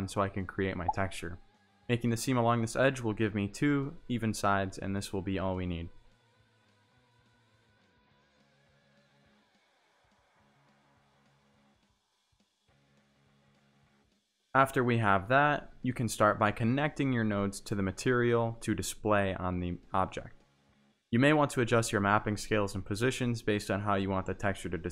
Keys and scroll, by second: 4.1 3, 5.6 4, 6.8 r, 9.9 s, 10.4 g, 12.5 s, 13.1 g, 14.8 s, 15.2 g, 17.3 Tab, 21.3 z.